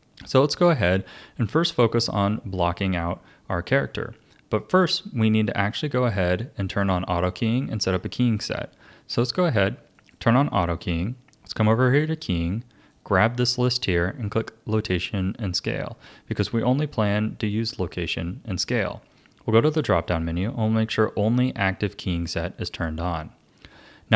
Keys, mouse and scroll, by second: 9.9 click, 11.8-14.9 drag, 19.6-22.7 drag.